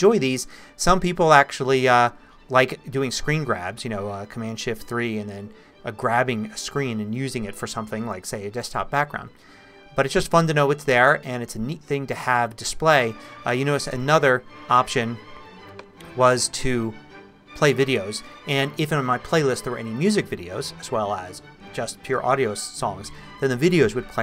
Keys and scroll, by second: 14.0 Escape.